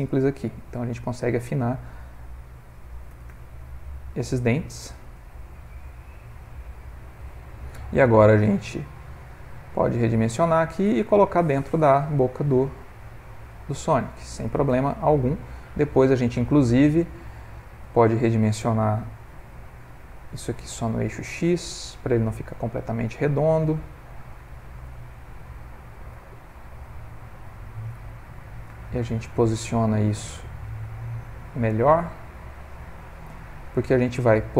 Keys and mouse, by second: 0.1 middle click, 3.1 g, 5.2 Tab, 5.5 middle click, 8.4 s, 10.3 g, 11.4 middle click, 13.5 click, 14.1 ctrl+middle click, 14.3 middle click, 14.5 ctrl+middle click, 14.7 g, 16.2 middle click, 17.3 ctrl+middle click, 18.2 middle click, 19.3 s, 22.7 middle click, 24.5 click, 25.3 g, 26.2 r, 28.0 r, 29.7 g, 31.6 middle click.